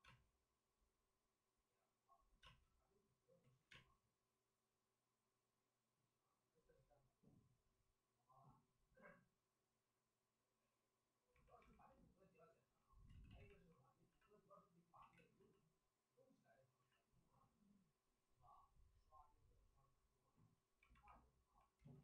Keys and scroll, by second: 0.0 space, 2.4 space, 3.4 ctrl+z, 3.7 space, 13.0 ctrl+z, 13.2 ctrl+z, 14.0 c, 14.9 ctrl+z, 19.0 c, 21.7 ctrl+z.